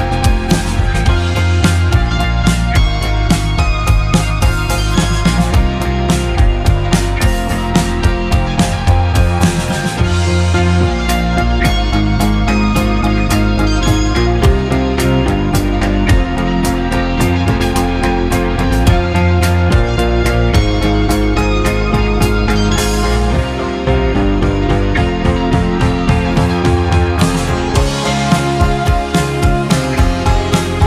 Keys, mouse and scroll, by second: 0.5 ctrl+r, 18.1-20.6 middle drag, 23.6 ctrl+r, 24.2 ctrl+r, 26.0-28.5 middle drag.